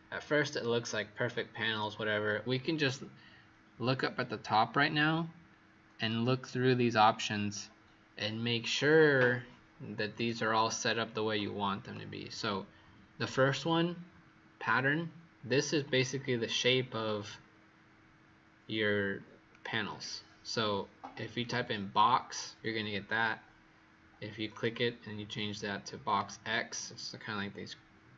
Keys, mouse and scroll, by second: 10.1 click.